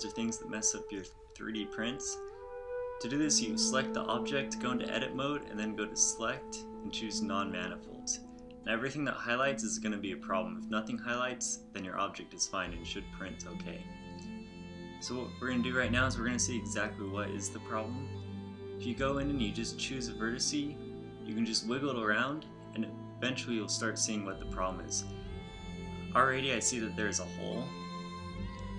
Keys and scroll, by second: 8.9 z, 10.1 z, 10.9 z, 14.7 a, 21.5 g.